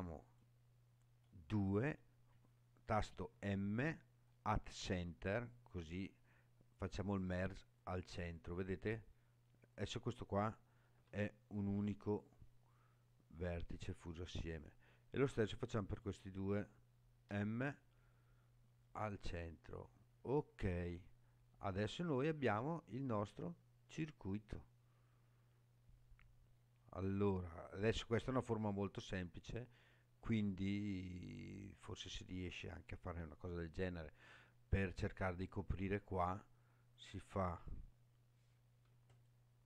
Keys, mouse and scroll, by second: 3.3 m, 9.7 click, 10.9 g, 13.8 right click, 15.2 click, 17.3 m, 19.9-20.6 scroll down 5, 21.6-25.6 middle drag, 25.6 click, 25.6 middle click, 25.8 click, 25.9 middle click, 26.0 click, 26.0 middle click, 26.2 click, 27.0 scroll down 2, 35.9 scroll up 2, 36.9 click, 39.1 alt+click.